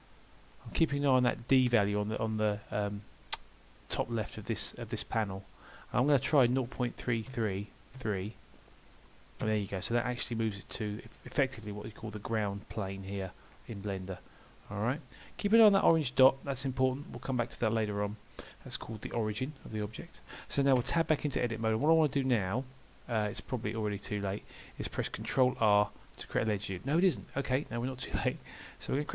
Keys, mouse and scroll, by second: 10.6 middle click, 13.5 scroll down 2, 16.7 middle click, 21.9 KP_1, 23.1 middle click, 25.6 ctrl+r.